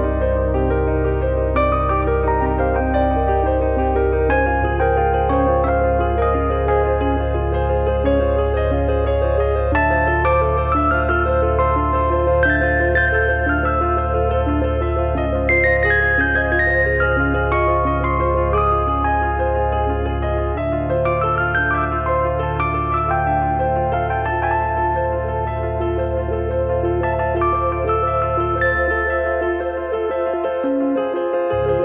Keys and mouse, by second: 1.0 click, 1.7 click, 2.5 click, 3.4 click, 4.6 click, 5.4 click, 6.5 click, 13.8 click, 22.1 middle click, 31.5 3, 31.7 click.